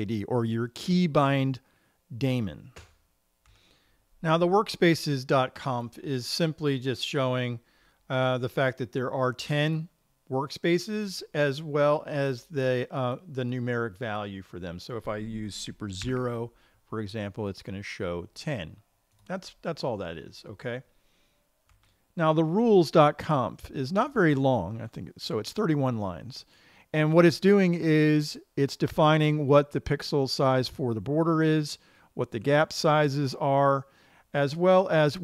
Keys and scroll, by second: 16.5 super+0.